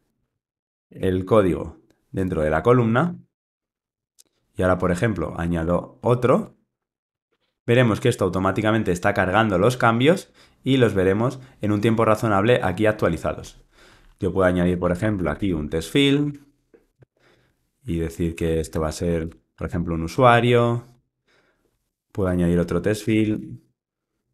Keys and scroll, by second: 0.5 alt+Return, 2.3 alt+Return, 2.5 super+x, 3.1 super+v, 5.6 Tab, 6.5 Tab, 17.2 Return.